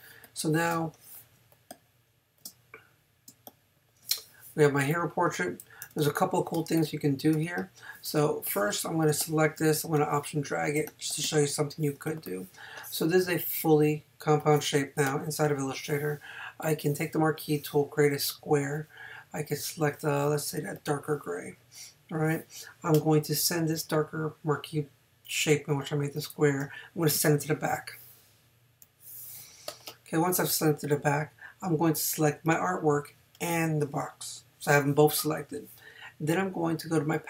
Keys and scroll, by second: 0.7 space, 3.3 space, 9.1 space.